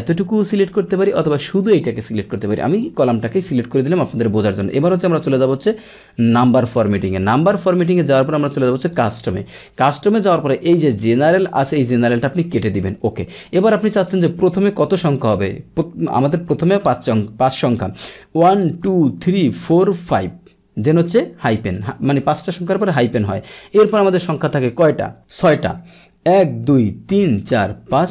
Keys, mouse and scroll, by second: 0.0 click, 1.7 click, 2.7 click, 6.3 click, 7.3 click, 8.8 click, 10.7-28.1 drag.